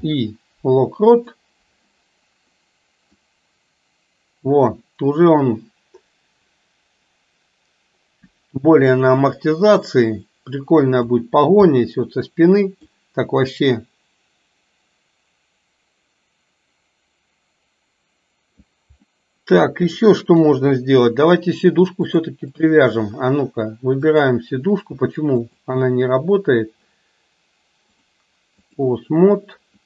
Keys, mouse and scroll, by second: 3.3-11.2 drag, 11.9-13.0 middle drag, 13.9-18.8 drag, 19.2-20.2 middle drag, 20.4 KP_3, 22.1 click, 24.1 click, 28.0-28.9 drag.